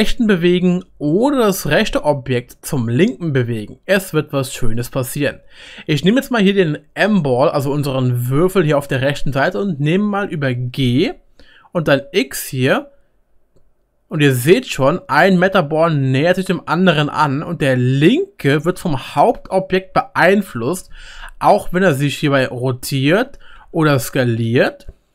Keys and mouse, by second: 10.6 g, 21.6 r.